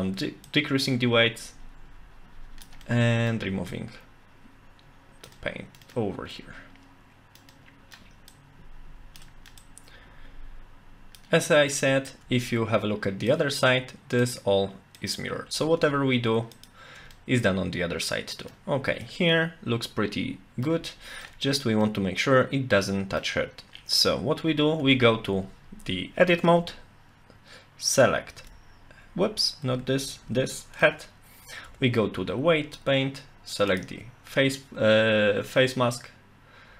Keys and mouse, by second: 0.5-2.7 drag, 2.9 middle click, 3.7-5.3 drag, 5.3 middle click, 5.9 middle click, 6.4-7.4 middle drag, 7.5 middle click, 8.3 click, 9.2 middle click, 9.6-11.2 drag, 11.7 middle click, 13.3 shift+click, 14.2 shift+click, 16.5 shift+click, 17.1-18.5 middle drag, 19.0-20.7 middle drag, 20.9 shift+middle click, 21.8-23.2 middle drag, 24.8 Tab, 28.4 l, 29.6 a, 29.8 a, 30.2 l, 30.8 middle click, 31.7 Tab, 33.7 click.